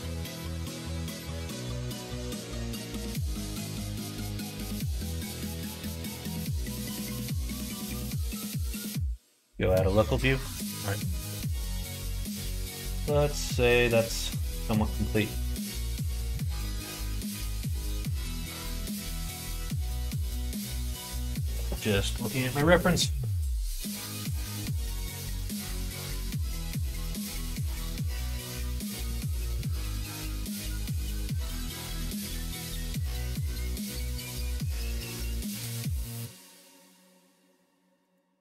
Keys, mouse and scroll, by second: 0.2 shift+click, 0.6 middle click, 1.4 e, 3.2 2, 3.5 click, 4.0 shift+click, 4.9 f, 5.1 middle click, 6.2 click, 6.7 shift+click, 7.4 f, 7.7 middle click, 9.3 /, 10.1 click, 10.3 Tab, 10.5 click, 11.0 middle click, 11.8 middle click, 14.1 middle click, 14.6 shift+middle click, 15.1 middle click, 29.7 middle click, 30.6 middle click, 31.0 shift+middle click, 31.7 middle click, 32.0 middle click, 32.8 click, 33.3 Tab, 34.1 middle click, 35.1 middle click, 35.6 shift+middle click, 35.9 middle click, 37.3 alt+click, 38.0 alt+click.